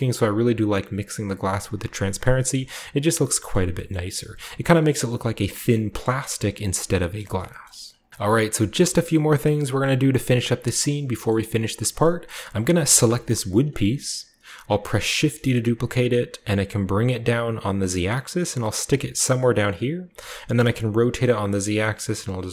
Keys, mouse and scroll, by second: 2.2-3.2 shift+middle drag, 2.3-2.9 scroll up 1, 2.9 scroll down 1, 3.0-4.2 scroll up 1, 3.5 shift+middle click, 3.9 shift+middle click, 4.2-5.4 scroll down 1, 4.2-5.7 shift+middle drag, 6.9 shift+middle click, 7.1-8.1 shift+scroll up 2, 7.5 shift+middle click, 8.8 shift+middle click, 9.8-10.9 middle drag, 11.2-11.7 shift+middle drag, 11.9-15.0 shift+middle drag, 15.1 shift+d, 15.9 z, 19.4 click, 20.1 r, 20.4 z.